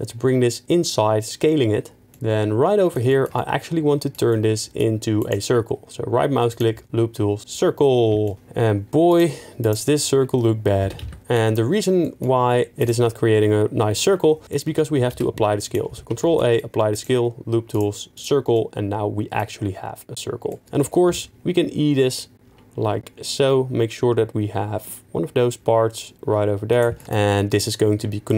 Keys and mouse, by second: 5.2-7.4 right drag, 9.1 click, 9.6 click, 10.8 s, 11.0 x, 11.2 ctrl+z, 12.0 middle click, 12.9 right click, 14.7 Tab, 15.1 ctrl+a, 16.1 Tab, 16.9-18.3 right drag, 18.5 middle drag, 21.1 e, 26.7 right click.